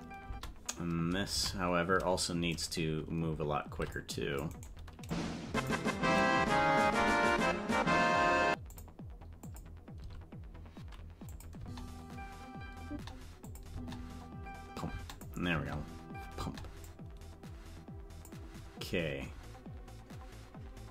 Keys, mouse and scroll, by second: 0.4 space, 1.3 a, 2.5-3.7 right drag, 3.7 c, 5.1 click, 6.9 s, 9.5 click, 9.9 s, 12.2 space, 13.0 space, 13.5 click, 13.7 space, 15.1 click, 15.1 space, 15.5 space, 16.9-18.3 drag.